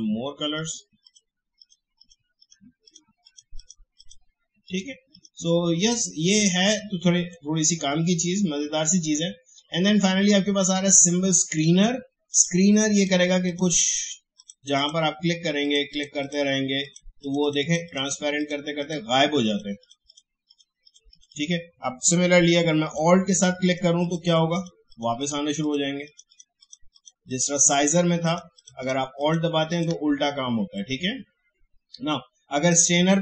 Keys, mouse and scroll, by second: 29.3-33.2 alt+drag.